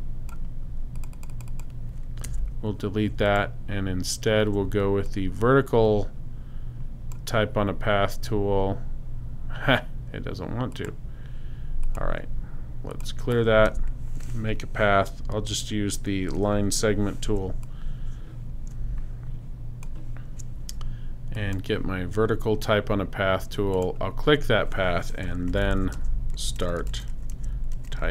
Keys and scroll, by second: 2.2 BackSpace, 3.1 super+BackSpace, 13.7 super+BackSpace, 14.5 BackSpace, 16.7 \, 25.1-28.1 typing.